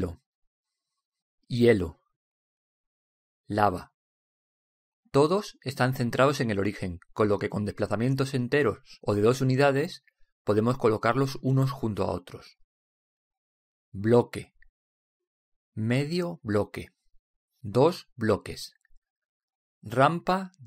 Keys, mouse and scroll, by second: 2.5-4.1 drag, 5.3-6.4 drag, 7.8 right click, 15.9-19.0 drag.